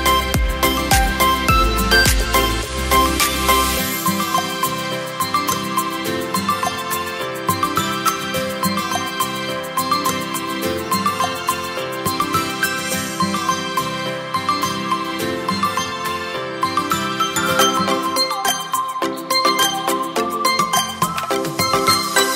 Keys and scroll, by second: 1.0 ctrl+t, 1.2 ctrl+t, 19.9 space.